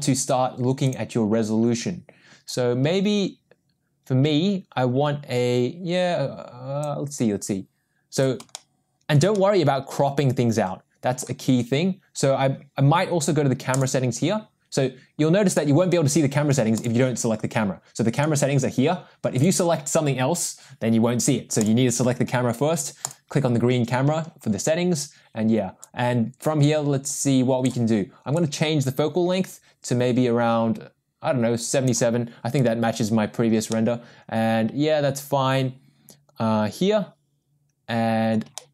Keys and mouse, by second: 0.8 click, 2.4-6.8 drag, 7.3 click, 8.5 shift+middle click, 9.3-11.2 middle drag, 16.8 click, 19.3 click, 21.6 click, 25.8-27.7 drag, 28.5-31.9 drag, 33.7-38.3 middle drag, 38.6 shift+middle click.